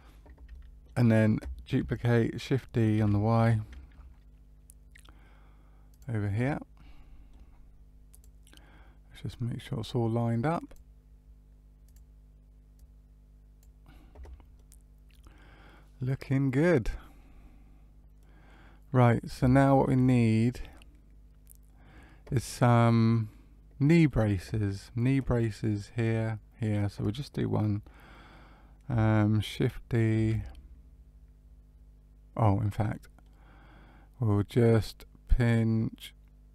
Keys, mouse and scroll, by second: 0.5 middle click, 2.9 shift+d, 6.4 middle click, 8.1 click, 9.6 click, 11.8 click, 12.7 click, 14.5 middle click, 18.1 middle click, 19.5 shift+middle click, 20.0 middle click, 27.7 middle click, 30.1 shift+a, 32.8 middle click.